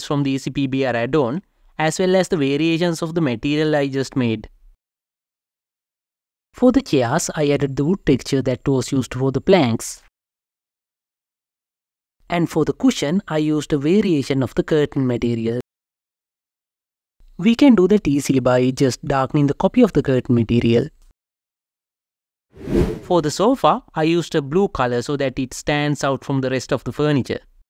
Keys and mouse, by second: 0.0 click, 1.5 Tab, 4.4 click, 6.6 Tab, 10.5 click, 12.0-14.9 drag, 17.0 click, 20.4 click, 23.4-25.0 drag, 25.8-27.4 drag, 27.5 click.